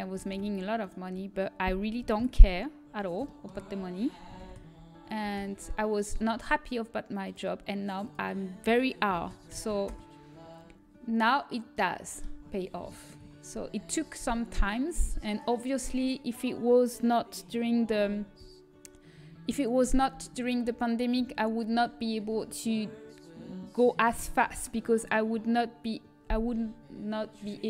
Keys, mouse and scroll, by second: 0.2 shift+d, 2.1 shift+c, 10.2 ctrl+m, 12.6-18.6 middle drag.